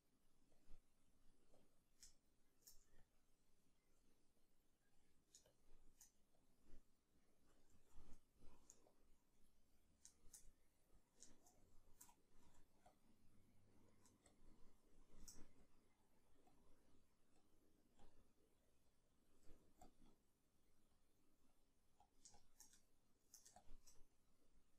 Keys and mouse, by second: 2.1 shift+middle click, 7.7 ctrl+z, 10.2-14.3 shift+middle drag, 12.4 f, 14.3-22.8 shift+drag, 19.5 f, 22.8 shift+middle click, 23.6-24.7 shift+drag.